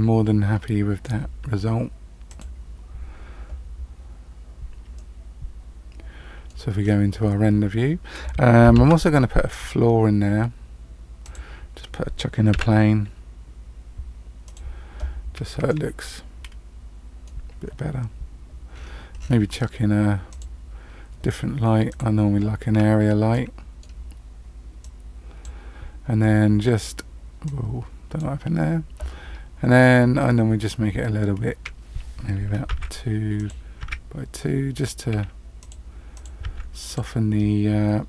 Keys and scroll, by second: 8.7 shift+a, 12.5 s, 32.6 KP_2.